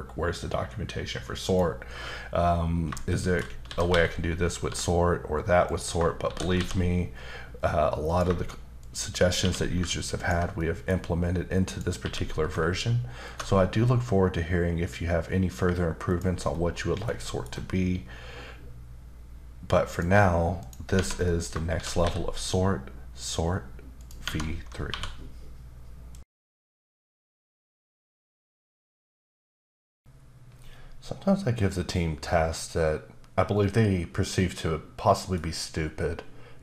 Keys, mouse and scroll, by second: 1.5 click, 3.1 shift+middle click, 3.7 typing, 5.7 click, 6.2 shift+d, 8.1 click, 8.8 shift+click, 9.4 q, 10.2 ctrl+click, 10.6 middle click, 11.0-11.7 scroll up 3, 11.7 click, 12.0 q, 13.3 ctrl+shift+click, 16.1 shift+click, 16.5-17.3 shift+scroll down 4, 17.3 shift+middle click, 20.6 shift+click, 21.0 shift+Tab, 21.3 shift+middle click, 21.7 shift+d, 24.0 click, 24.2 Tab, 24.9 1.